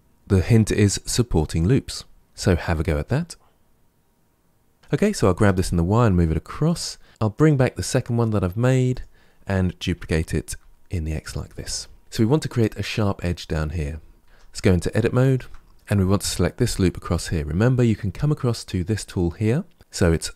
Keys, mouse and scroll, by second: 2.2-4.4 middle drag, 4.8 middle click, 5.0 g, 7.2 click, 8.8 click, 9.8 shift+d, 14.1 Tab, 14.9-16.8 shift+middle drag.